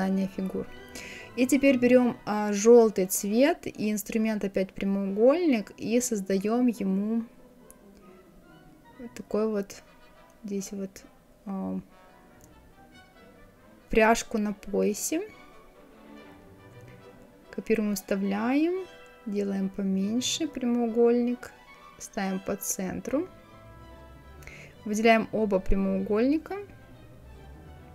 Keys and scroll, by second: 16.9 ctrl+c, 17.4 ctrl+f, 20.5 Up.